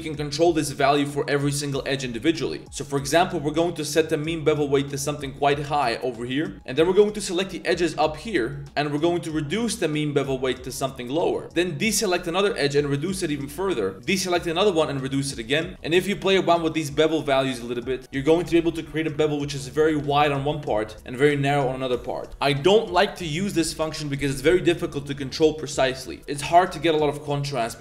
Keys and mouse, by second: 0.8 click, 2.2 middle click, 2.5 z, 3.2-5.4 drag, 6.5 middle click, 6.7 z, 7.0 z, 7.2 click, 8.5 ctrl+click, 9.7-11.4 drag, 11.9 shift+click, 12.1 z, 13.1-14.1 drag, 14.9 click, 15.7 shift+Tab, 15.7 shift+middle click, 16.6 click, 16.9-18.0 drag, 18.0 Tab, 18.7 click, 18.9 Tab, 20.5 click, 20.7 Tab, 20.9 click, 26.2 Tab, 26.8 1.